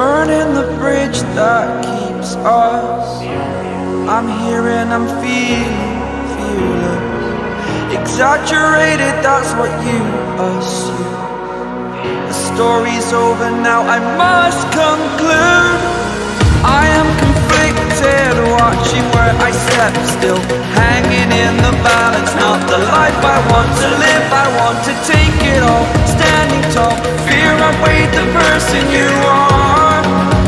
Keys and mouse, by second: 4.4 Left, 5.2 Left, 7.5 Right, 8.0 Return, 10.9 click, 13.9 click, 15.7 click, 17.4 click, 19.5 click, 20.6 click, 21.9 click, 24.6 click, 26.6 click, 29.2 click.